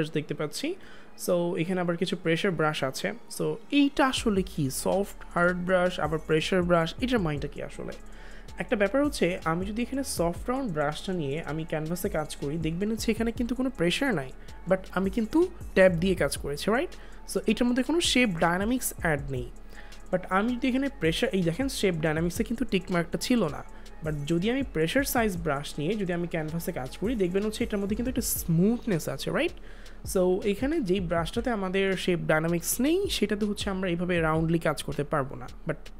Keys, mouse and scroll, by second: 2.3 click, 10.1 click, 10.1 click, 13.4 click, 15.0 ctrl+z, 24.8 click, 30.5 click, 30.6 ctrl+z.